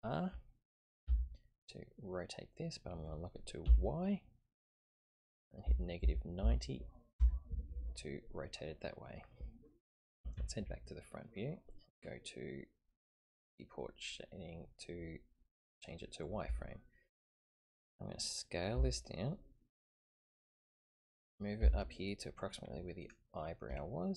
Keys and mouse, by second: 1.1 r, 10.4 ctrl+KP_3, 13.4 click, 18.7 s, 21.6 g, 23.8-24.1 shift+middle drag.